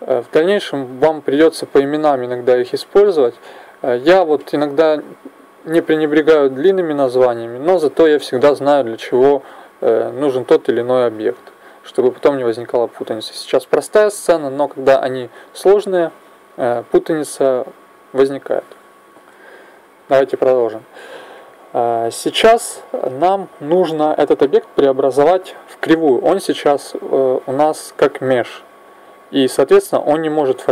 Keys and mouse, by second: 20.4 n.